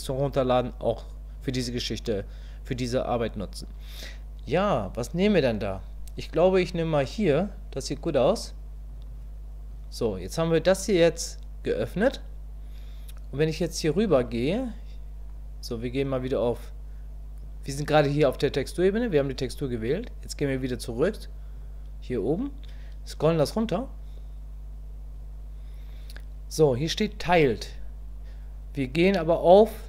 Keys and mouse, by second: 21.5 click, 27.6-29.8 drag.